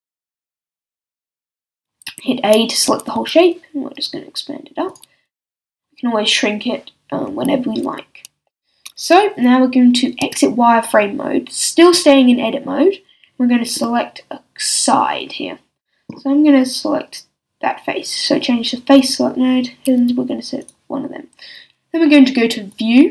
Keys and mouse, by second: 1.6 a, 2.1 a, 2.8 s, 5.3-6.3 drag, 5.4 a, 8.6-14.1 middle drag, 10.2 z, 15.6-18.9 middle drag, 18.9-20.6 drag, 20.6 middle click, 20.8-22.7 drag.